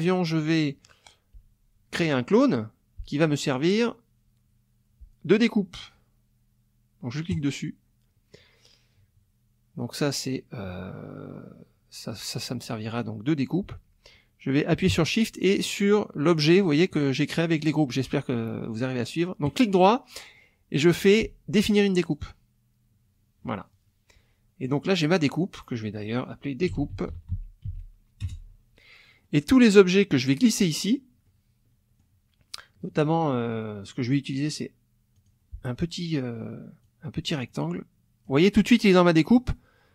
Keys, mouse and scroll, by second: 7.4 click, 16.3 shift+click, 22.2 click, 24.7 click, 25.2 click, 26.4-28.1 typing, 28.2 Return, 29.2-29.9 scroll up 2, 30.3 click, 31.3-32.1 scroll up 2, 35.2 click, 36.8-38.4 drag.